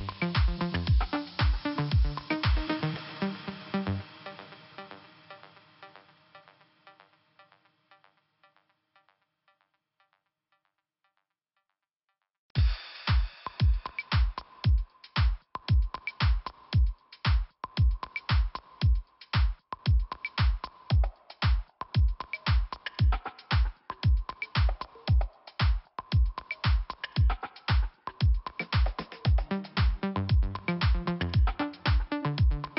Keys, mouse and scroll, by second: 0.7-1.2 scroll down 2, 2.9 click, 4.8 scroll up 2, 6.2 click, 7.0 click, 9.2 click, 11.1 click, 11.7 click, 12.8 click, 13.5 click, 13.6 click, 14.2 click, 15.2 click, 15.3 click, 15.9 click, 17.2 click, 18.0 click, 20.0 click, 20.5 click, 21.1 click, 22.9 click, 23.6 click, 25.1 click, 25.3 click, 25.9 click, 26.4 click, 27.6 scroll down 1, 28.7 click, 31.4 scroll down 1, 32.0 scroll up 1.